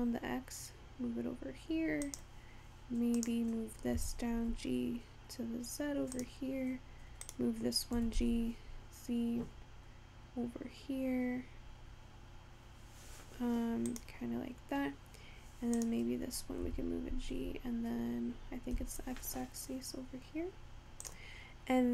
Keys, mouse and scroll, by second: 3.3 click, 4.0 g, 7.3 click, 8.1 g, 15.8 click, 16.7 g.